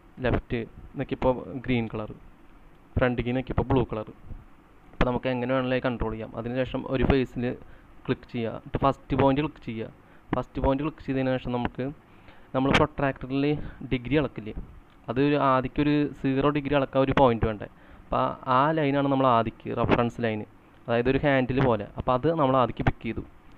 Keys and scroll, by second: 0.3 Left, 11.1-11.8 typing, 19.2-20.0 typing.